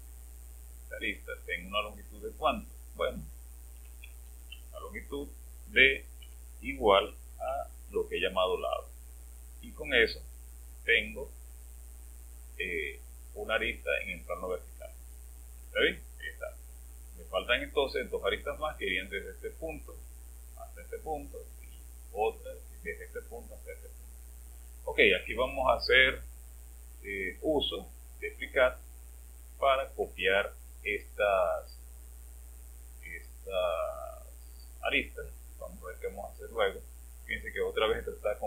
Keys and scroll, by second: 3.5-5.0 typing, 6.2-7.4 typing.